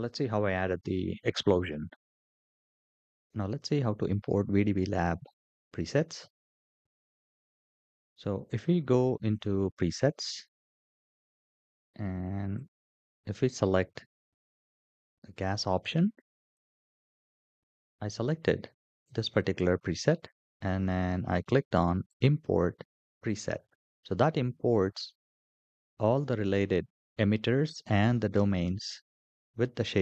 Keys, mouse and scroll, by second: 5.9 n, 9.1 click, 12.3 click, 13.3-14.8 drag, 16.2-19.0 drag, 21.8 click.